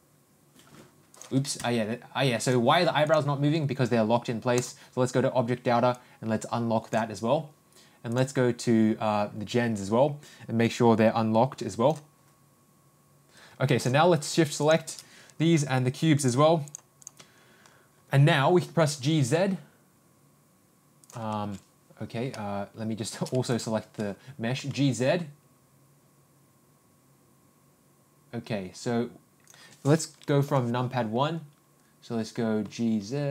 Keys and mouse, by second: 2.4 click, 3.0 ctrl+click, 4.5 ctrl+click, 5.9-6.9 drag, 8.1 click, 10.7-11.9 drag, 16.1 ctrl+click, 16.6 ctrl+click, 17.0 ctrl+click, 18.8 g, 24.5 ctrl+g, 32.6 g.